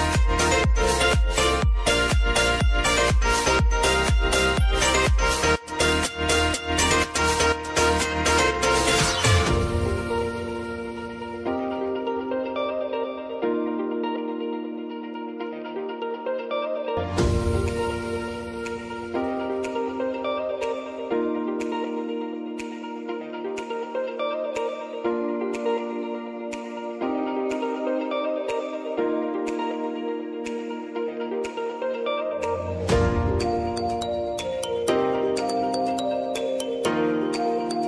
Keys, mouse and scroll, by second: 0.7 click, 9.4 click, 10.2 space, 12.2 space, 12.5 click, 13.4 space, 16.4 space, 16.7 click, 17.2 space, 19.8 space, 20.2 click, 21.4 right click, 22.4-28.5 drag, 28.8 s, 29.8 click, 30.2 space, 33.3 space, 33.7 click, 35.3 Return, 36.5-37.8 drag.